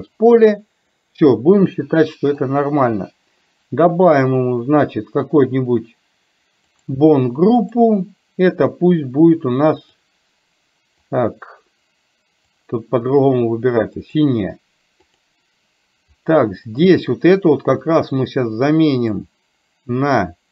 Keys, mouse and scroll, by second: 4.2 click, 6.9 click, 7.6 click, 9.9 click, 11.1 click, 12.6-14.2 drag, 15.1 click, 16.7 click, 17.9 click, 19.0-20.5 drag.